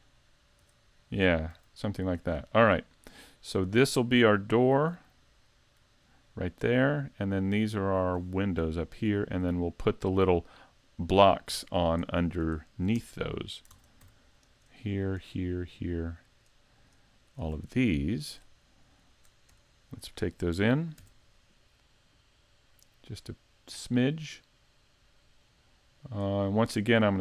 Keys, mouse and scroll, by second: 0.6 Tab, 1.5 a, 2.2 right click, 3.5 right click, 5.2 right click, 8.7 middle click, 11.5 z, 11.7 scroll up 2, 12.1 middle click, 12.6 shift+middle click, 13.0 Tab, 13.7 ctrl+Tab, 14.5 right click, 15.2 shift+right click, 15.8 right click, 16.3 right click, 16.8 right click, 17.3 right click, 18.0 shift+middle click, 18.6 middle click, 19.3 scroll up 2, 19.7 shift+middle click, 21.0 e, 26.1 click, 26.6 middle click.